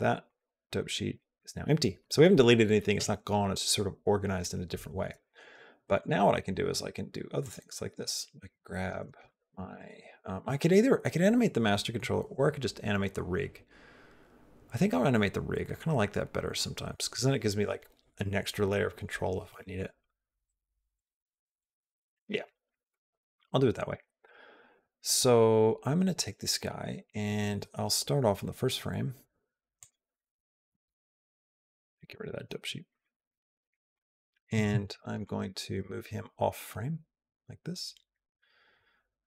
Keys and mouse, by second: 0.1 click, 7.3 click, 23.8 click, 29.6 click, 31.7 click, 33.9 click, 34.8 ctrl+z, 35.1-39.2 drag.